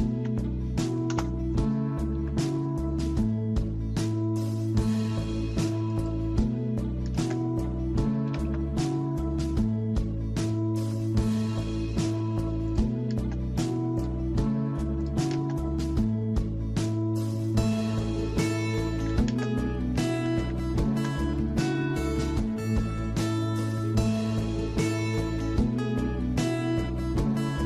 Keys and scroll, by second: 2.2 Escape, 4.7 typing, 8.3 Escape, 8.5 Escape, 10.8 Escape, 19.1-21.2 typing.